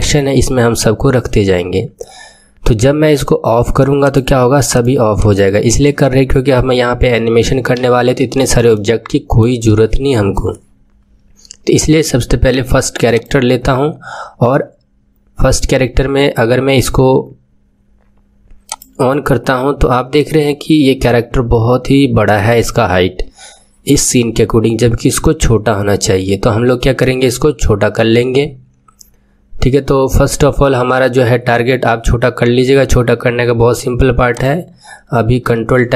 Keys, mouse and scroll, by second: 3.9-7.7 drag, 7.7 KP_1, 8.7-11.7 shift+middle drag, 13.3-16.1 drag, 18.7 click, 19.8-34.2 middle drag, 34.2-35.4 drag, 35.4 ctrl+Tab.